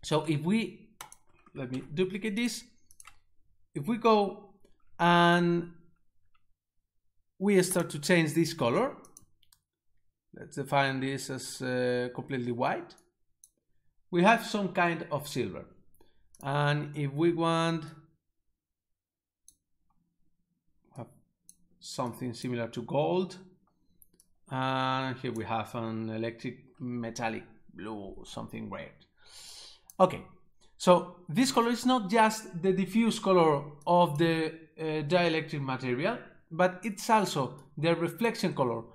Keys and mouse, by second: 1.1 click, 1.7 shift+d, 2.4 click, 7.7 click, 13.1 click, 16.4 click, 17.8 click, 18.0 click, 21.1 click, 22.2 click, 24.2 click, 24.3 click, 29.6 click, 33.9 click, 37.7 click.